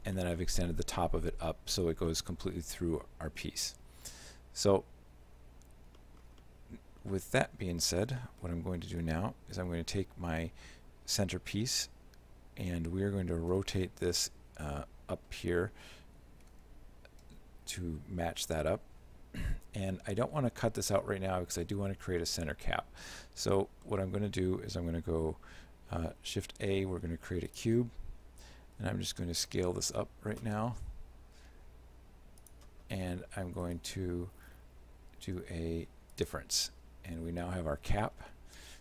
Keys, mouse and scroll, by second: 0.1-0.5 scroll down 3, 0.2 middle click, 1.6 middle click, 2.1 shift+middle click, 5.9 scroll down 1, 6.0 middle click, 6.5 shift+middle click, 8.1-8.8 scroll down 2, 8.8 middle click, 9.1 right click, 14.4 r, 19.5 z, 22.2 shift+middle click, 26.1 shift+a, 28.8 s, 33.7 shift+right click, 36.2 click, 38.3 shift+middle click.